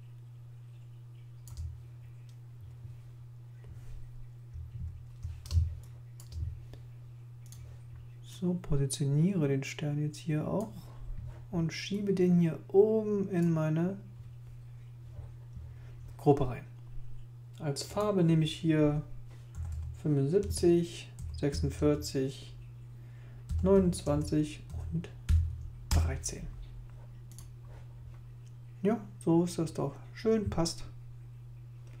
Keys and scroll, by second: 4.7 super++, 5.5 super+space, 19.3-21.5 typing, 20.4 Tab, 21.7 Tab, 23.2-25.2 typing, 25.9 Page_Up.